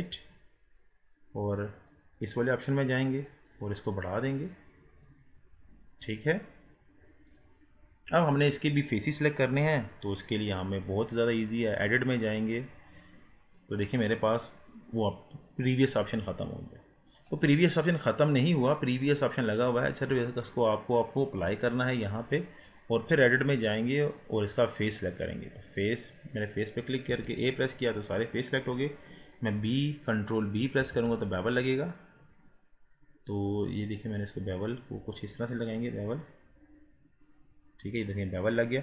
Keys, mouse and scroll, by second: 1.9 click, 3.5-4.5 drag, 4.5-10.5 middle drag, 10.5-12.5 drag, 12.5-15.6 scroll up 1, 17.3-20.3 drag, 20.5-25.7 drag, 25.8-27.1 drag, 27.1 a, 30.9 ctrl+b, 37.8 scroll up 4, 38.5-38.8 middle drag.